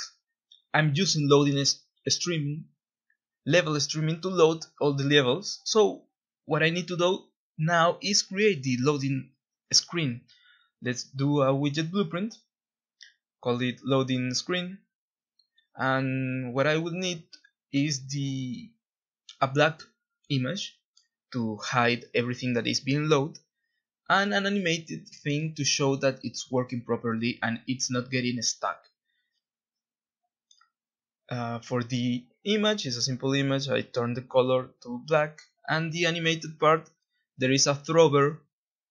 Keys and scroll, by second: 0.0-0.9 typing, 1.1 Escape, 1.9 Delete, 7.7 ctrl+b, 12.1-14.7 typing, 14.7 Return, 18.8 Tab, 18.8 0, 19.0 Tab, 19.0 0, 20.5-23.4 typing, 25.5-28.0 typing, 29.7 F2, 29.8-32.7 typing, 36.5 Tab, 36.5-38.9 typing, 36.7 Tab.